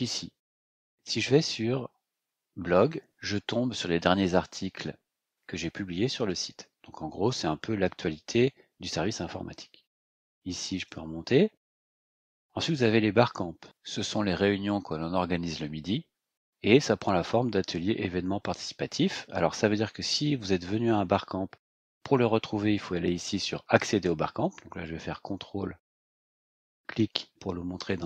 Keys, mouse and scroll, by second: 2.8 click, 5.5-5.9 scroll down 2, 6.3-7.2 scroll up 4, 10.7 click, 12.6 click, 25.8 ctrl+click, 27.8 click.